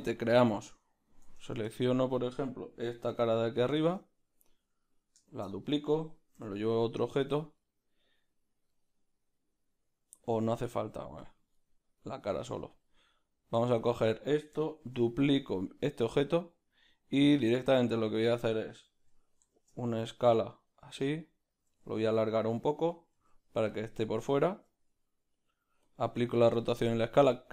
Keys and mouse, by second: 1.4 Tab, 3.4-5.3 right drag, 3.8-6.8 shift+middle drag, 5.3 shift+d, 6.8 p, 7.3 Tab, 7.6-11.3 right drag, 11.3 z, 11.6-12.8 right drag, 12.8 x, 13.2-14.8 right drag, 14.8 shift+d, 19.1 s, 23.7 z, 25.9 ctrl+a, 26.9-27.5 right drag.